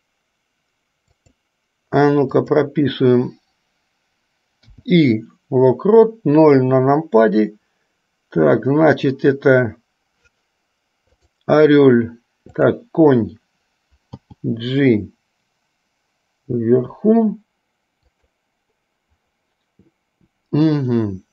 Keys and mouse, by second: 1.4 click, 2.6 click, 4.7 i, 6.7 KP_0, 14.4 g.